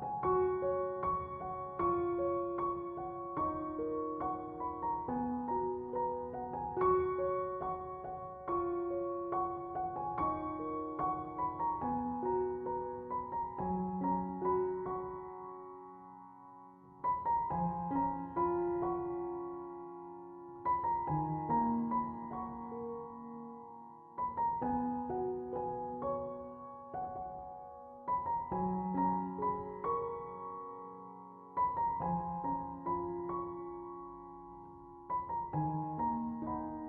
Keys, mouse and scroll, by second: 1.0 5, 1.2 ., 1.5 5, 1.9 Return, 8.7 3, 8.8 ., 9.2 5, 9.6 Return, 17.8 4, 18.2 8, 18.6 Return, 20.3 f, 27.6 3, 28.0 8, 28.4 Return, 29.9 Escape.